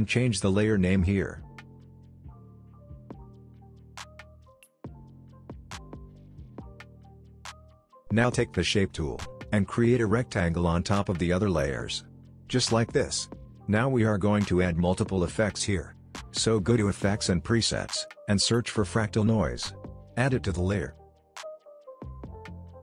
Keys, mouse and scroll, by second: 0.1 right click, 0.6 click, 2.2-3.9 typing, 4.7 click, 5.9 right click, 7.0-10.9 drag, 17.1-18.5 typing, 19.5 click.